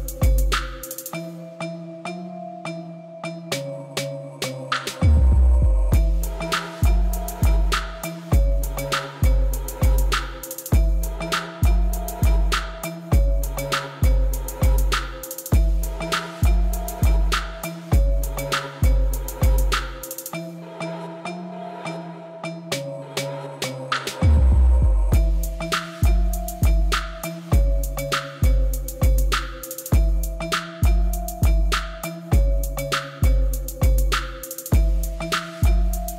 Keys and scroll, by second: 2.3 g, 2.5 y, 19.2 p, 19.4 o, 19.4 s, 19.8 t, 20.1 Return, 26.3 alt+a, 30.9 shift+d, 31.4 y, 33.1 Escape, 35.5 shift+d, 35.9 y.